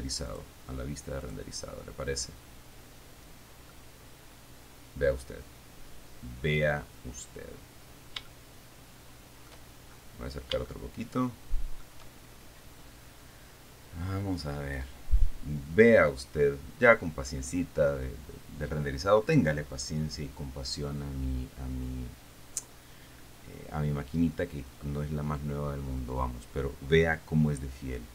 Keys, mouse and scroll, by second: 0.5 click, 1.5 click, 4.0-5.6 middle drag, 8.5-9.9 shift+middle drag, 10.9-12.2 shift+drag.